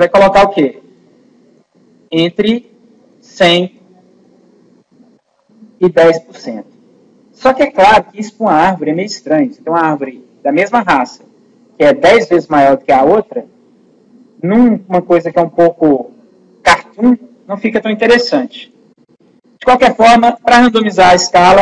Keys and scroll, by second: 17.8 ctrl+z.